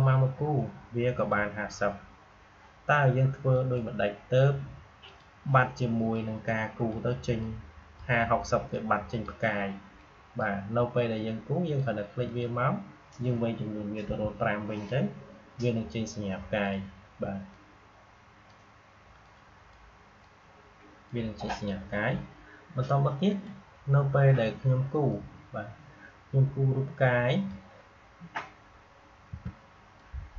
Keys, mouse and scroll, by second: 14.7-29.3 drag, 29.3 Delete, 30.0-30.3 drag.